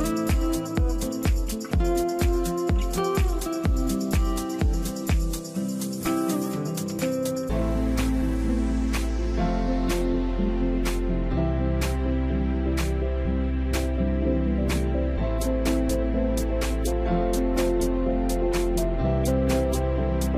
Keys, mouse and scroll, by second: 2.7-3.0 scroll down 1, 3.3 alt+Tab, 3.9 space, 6.2 double click, 7.9 space, 10.8 space, 12.2 ctrl+click, 15.2 space, 15.7 Return, 15.9 Return, 18.9 shift+click, 19.3 right click.